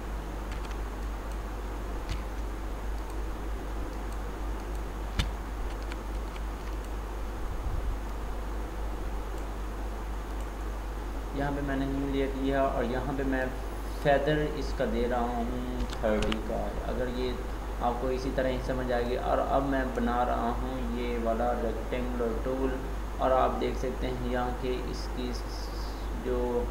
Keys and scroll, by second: 5.8 ctrl+d.